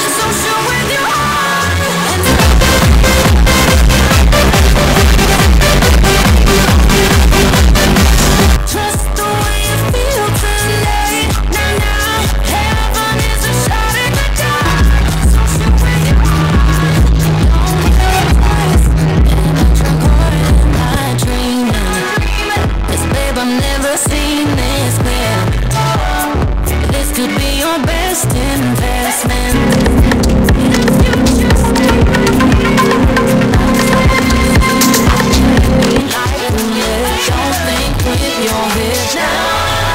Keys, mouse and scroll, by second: 9.1 Page_Down, 21.3 Page_Down, 36.1 Page_Down.